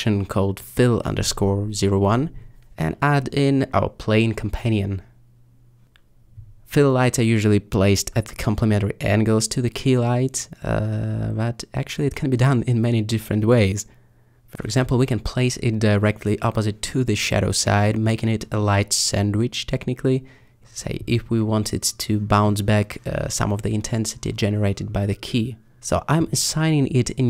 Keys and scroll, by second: 0.0-0.8 typing, 2.6 a, 4.5 s, 5.8 g, 5.9 z, 8.3 r, 9.7 alt+s, 10.4 g, 13.4 alt+r, 13.4 alt+z, 14.2 g, 15.5 r, 26.8-27.2 typing.